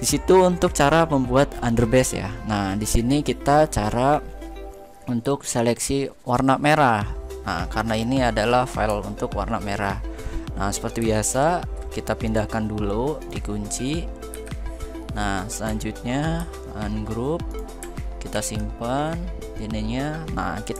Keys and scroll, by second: 10.7 ctrl+x, 14.0 ctrl+v, 16.1 ctrl+u, 18.0 ctrl+x.